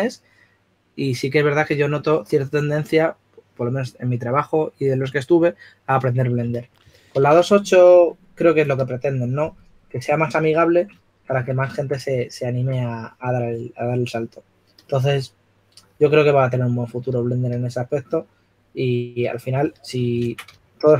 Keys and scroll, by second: 7.9 s, 9.1-10.2 typing, 20.6 super+z.